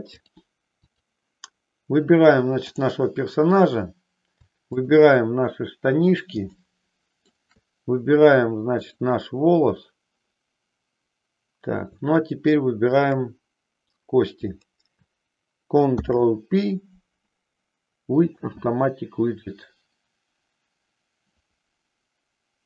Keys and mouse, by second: 0.1 click, 2.6 click, 4.6 shift+click, 6.5 shift+middle click, 8.9 shift+click, 12.9 shift+click, 15.9 ctrl+p.